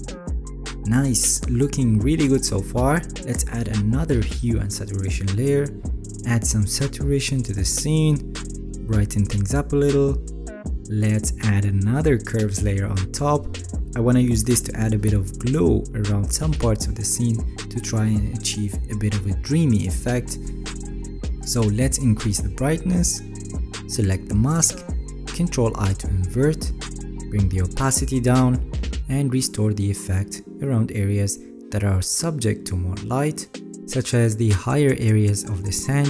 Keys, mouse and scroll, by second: 25.8 ctrl+i, 34.0 alt+right click, 34.2 alt+right click, 35.2 right click, 35.6 middle click, 35.6-36.0 scroll up 5.